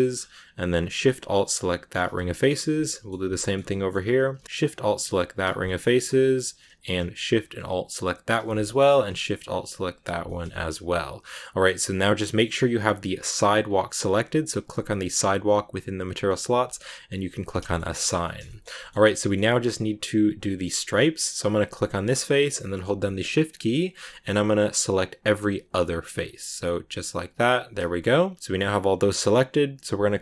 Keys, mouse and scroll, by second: 1.7 alt+shift+right click, 2.1 scroll down 4, 2.3-3.5 middle drag, 3.5-5.2 scroll up 3, 3.6 middle click, 5.2 alt+shift+right click, 5.5 scroll down 1, 5.5-8.2 middle drag, 8.2 alt+shift+right click, 8.5-9.8 middle drag, 9.8 alt+shift+right click, 10.0 scroll down 2, 10.2-13.1 shift+middle drag, 13.1-14.6 drag, 17.1 click, 17.5 shift+middle click, 18.0 scroll down 2, 18.1 middle click, 18.3 shift+scroll up 2, 18.4 shift+middle click, 18.6-21.7 middle drag, 21.7 right click, 21.9-23.7 middle drag, 23.7 shift+right click, 25.1 shift+right click, 26.3 shift+right click, 27.5 shift+right click.